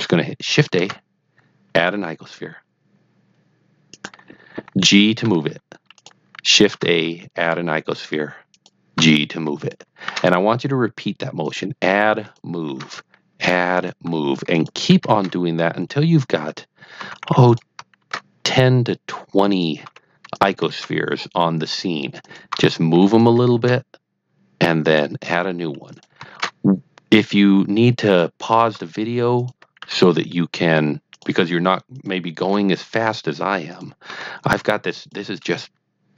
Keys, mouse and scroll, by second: 0.7 shift+a, 3.9 click, 5.2 g, 5.9 click, 6.6 shift+a, 8.5 click, 8.9 g, 9.5 click, 10.0 shift+a, 11.4 click, 11.8 g, 12.2 click, 12.6 shift+a, 13.7 click, 14.0 g, 14.4 click, 15.1 shift+a, 16.4 click, 16.9 g, 17.4 click, 17.9 shift+a, 19.4 click, 19.8 g, 20.3 click, 20.7 shift+a, 22.2 click, 22.5 g, 23.0 click, 23.5 shift+a, 24.8 click, 25.3 g, 25.8 click, 26.3 shift+a, 28.0 click, 28.7 g, 29.3 click, 29.7 shift+a, 31.1 click, 31.3 g, 31.9-32.2 drag, 32.4 shift+a, 33.6 click, 34.0 g, 34.9 click.